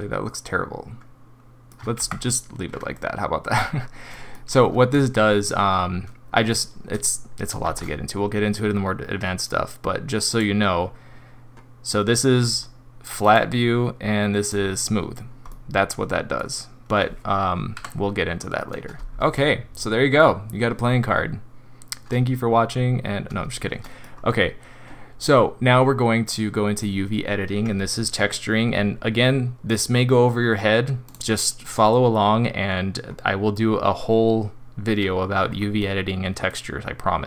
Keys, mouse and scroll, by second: 2.0 ctrl+z, 3.0 middle click, 3.4 middle click, 3.7-4.1 scroll down 3, 4.1 middle click, 7.6 shift+a, 12.6-13.2 scroll up 1, 13.2 right click, 15.5 middle click, 17.8 Delete, 19.0-19.3 scroll up 2, 19.4 middle click, 20.2 scroll down 3, 23.8 middle click.